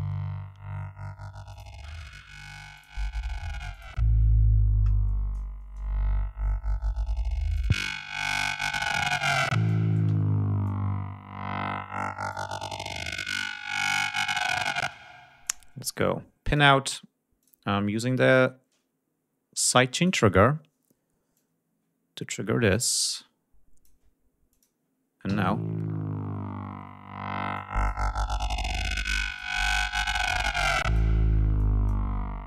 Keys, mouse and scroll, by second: 1.6 click, 2.8 click, 3.8 click, 7.5 click, 9.2 click, 10.7-12.5 drag, 13.2 click, 14.8 space, 15.5 click, 16.5 click, 17.4 click, 20.0 click, 21.4 click, 22.7 click, 23.2 click, 24.6 click, 25.4 l, 27.6 click, 29.3 click, 30.1 click, 31.6 click.